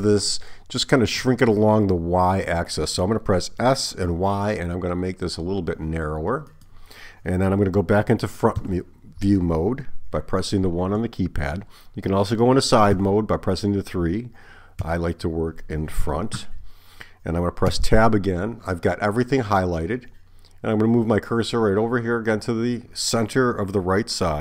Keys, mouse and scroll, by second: 3.6 s, 8.6 KP_1, 13.0 KP_3, 14.9 KP_1, 17.7 Tab.